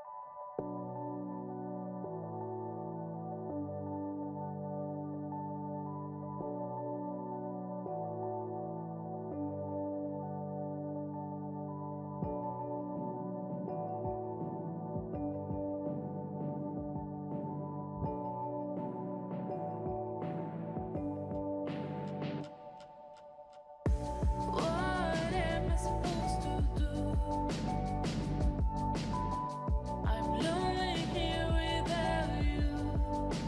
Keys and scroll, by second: 5.2 ctrl+-, 5.6 ctrl+0, 8.4 ctrl+s, 9.9 ctrl+0, 11.2 ctrl+=, 23.2 ctrl+0.